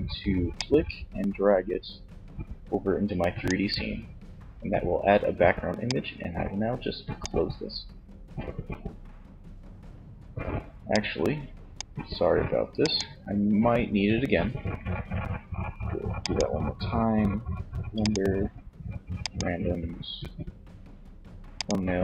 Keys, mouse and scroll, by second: 4.5 middle click, 5.4-6.7 drag, 10.0-22.0 drag.